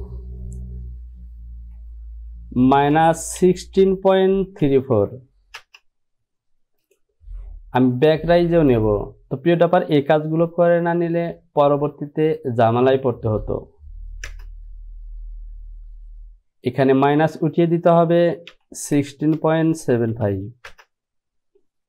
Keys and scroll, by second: 1.7 Down, 2.9 KP_Subtract, 3.5 KP_1, 3.9 KP_6, 4.3 KP_Decimal, 5.1 n, 7.4 typing, 11.9 Down, 14.5 Return, 18.7-20.8 typing.